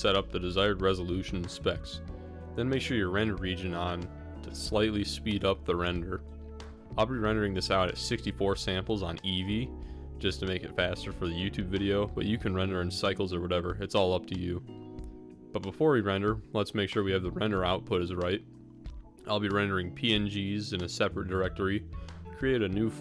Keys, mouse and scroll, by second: 0.4 click, 2.1 click, 3.8-5.3 drag, 7.3 click, 8.3-9.3 drag, 22.6-23.0 drag.